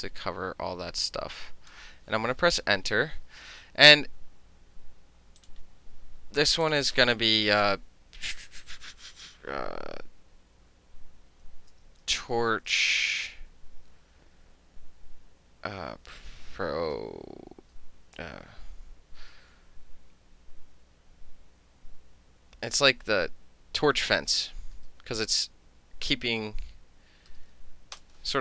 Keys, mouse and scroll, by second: 2.4 KP_3, 3.5-5.4 middle drag, 5.4 click, 5.5-6.5 middle drag, 6.5 click, 6.7 click, 11.4-13.4 typing, 16.6-18.5 typing, 23.9-27.9 typing, 28.0 Return.